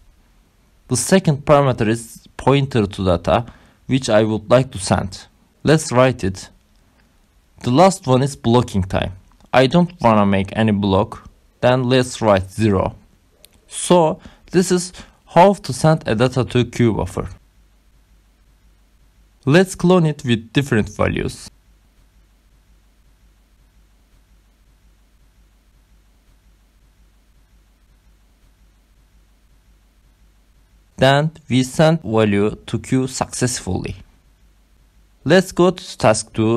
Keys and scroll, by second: 0.0-2.7 typing, 4.1 shift+8, 5.6 Right, 5.9-7.5 typing, 8.7-14.8 typing, 14.0 Left, 14.9 Right, 15.9 Right, 17.1-18.7 typing, 20.0 Return, 21.6 ctrl+c, 22.0 ctrl+v, 22.6 ctrl+v, 22.9 Return, 24.2 BackSpace, 24.3 3, 24.4 Up, 25.1 BackSpace, 25.2 2, 36.1-36.5 typing.